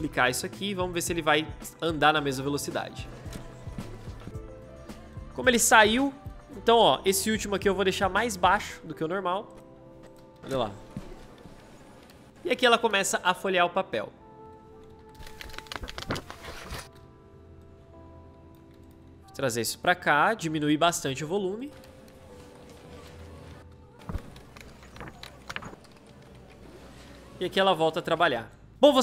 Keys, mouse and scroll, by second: 2.8 space, 7.6 \, 10.3 space, 14.8 i, 15.0 space, 16.7 o, 19.2 \, 21.5 space, 28.2 space.